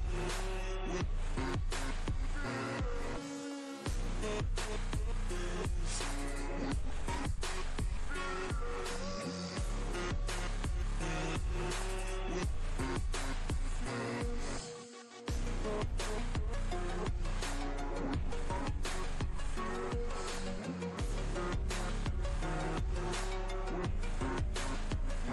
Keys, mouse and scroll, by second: 0.8-1.6 drag, 2.3 ctrl+g, 3.4 click, 6.5 click, 10.5 click, 14.4 click, 14.6 super+d, 17.3 click, 19.6 super+d, 20.6-21.5 click, 21.6-23.3 drag.